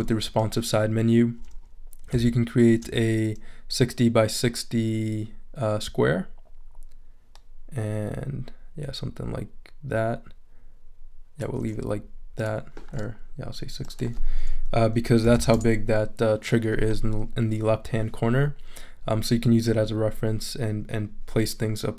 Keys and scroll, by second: 15.0-15.8 typing.